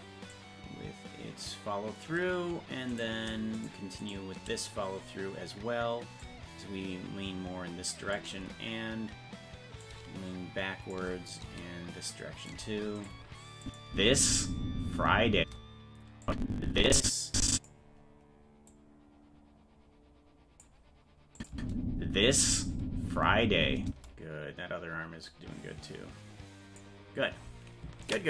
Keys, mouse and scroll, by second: 0.3-2.0 drag, 3.0 right click, 3.6 shift+right click, 6.2-8.2 drag, 9.8-10.9 drag, 11.3-12.5 drag, 13.0 right click, 13.6 click, 13.9 space, 16.2-17.6 drag, 18.7-20.6 drag, 21.4 click, 21.5 space, 25.2-26.8 drag.